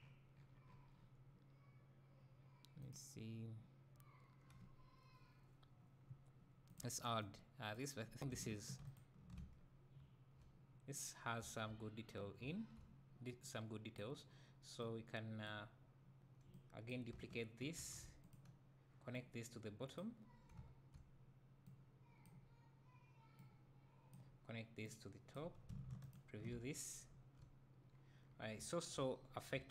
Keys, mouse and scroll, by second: 7.8 click, 8.9 ctrl+shift+click, 9.6-10.0 scroll down 1, 10.0 `, 11.0 scroll down 1, 11.5 `, 11.9-12.2 scroll up 1, 13.5-14.9 drag, 16.6-19.2 drag, 17.8 shift+d, 23.4-26.1 drag, 27.1 `, 27.7 scroll up 1, 27.9 scroll down 1, 28.6 `, 29.2-29.5 scroll up 1, 29.6 `.